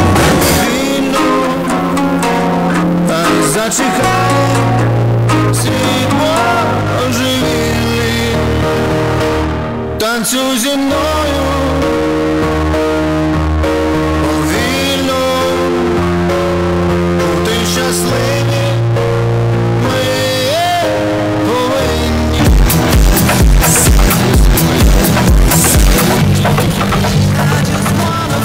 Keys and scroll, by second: 6.9 Page_Down.